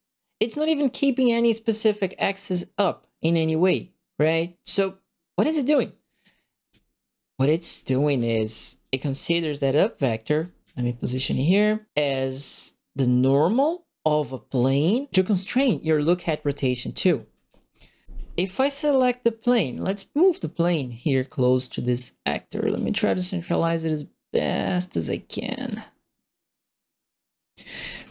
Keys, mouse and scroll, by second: 3.1-4.6 drag, 4.6 right click, 4.7 click, 4.8 right click, 4.9 click, 5.0 right click, 5.0-6.2 drag, 6.5-11.6 right drag, 6.6-11.1 typing, 16.8 right click, 17.1 a, 17.4 click, 17.4 q, 18.4 click, 18.6-20.0 typing, 19.3 right click, 20.7 click, 21.0 right click, 21.3-22.7 drag, 21.4 right click, 23.4-24.9 drag, 25.6-27.3 drag, 27.6-28.1 right drag, 27.7-28.1 typing.